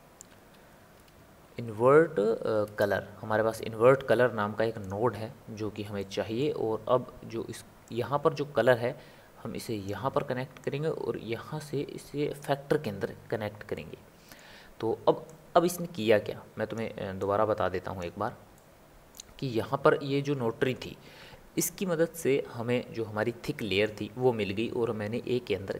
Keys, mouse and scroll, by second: 6.0-8.1 middle drag, 8.1 click, 10.8 click, 13.7-15.5 middle drag, 15.5 click, 17.4 click, 18.5-25.7 middle drag.